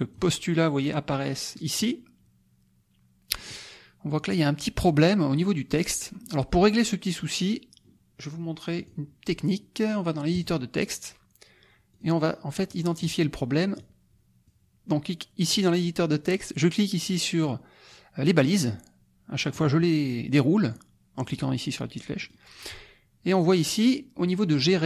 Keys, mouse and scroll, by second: 8.7 click, 10.3 click, 11.9 click, 12.6 click, 13.8 click, 18.5 click, 19.5 click, 20.6 click, 22.2 click.